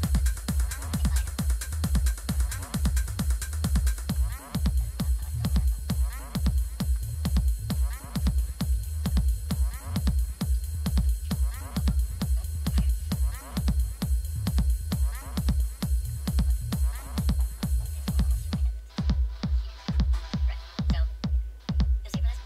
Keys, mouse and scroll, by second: 8.5 Down, 8.7 Up, 11.3 click, 12.1 click, 13.5 Return.